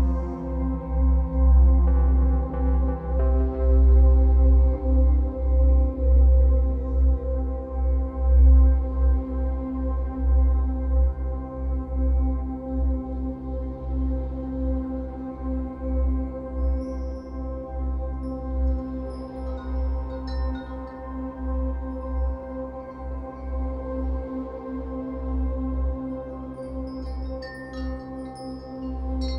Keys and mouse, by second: 0.0 click, 1.0 click, 2.3 click, 4.5 click, 5.5 click, 7.9 click, 8.8 click, 12.4-13.6 drag, 14.7-17.9 drag, 18.2-20.1 drag, 20.5-22.8 typing, 24.1 typing, 26.3-26.9 typing, 28.4 click.